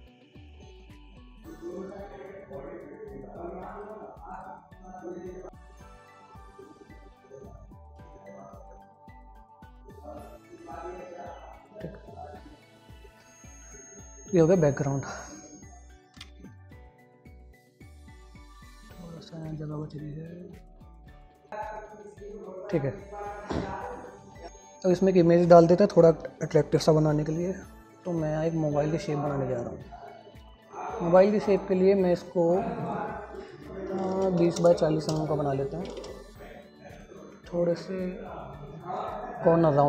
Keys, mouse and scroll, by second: 15.8 click, 17.3-19.3 drag, 19.5 c, 19.5 click, 24.4 click, 30.5 scroll down 1, 30.9 scroll up 1.